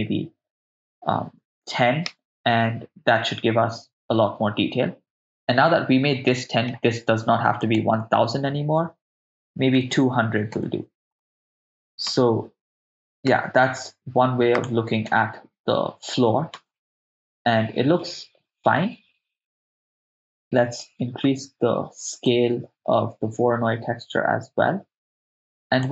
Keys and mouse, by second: 6.3 middle click, 7.6-10.6 drag, 10.1 0, 12.3 shift+space, 13.3 shift+space, 14.6 click, 15.1 shift+space, 16.6 shift+space, 18.2 shift+space, 18.8 shift+space, 20.8 middle click, 22.3-25.9 drag.